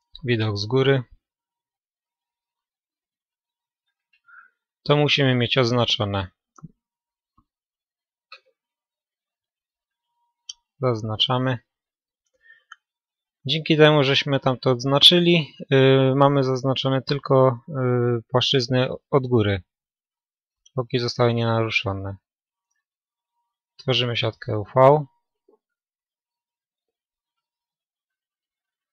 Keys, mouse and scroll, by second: 1.1 KP_5, 10.8 b, 11.5-17.3 middle drag, 17.3-17.8 scroll down 2, 17.4 middle click, 17.8-23.6 middle drag, 23.6 u.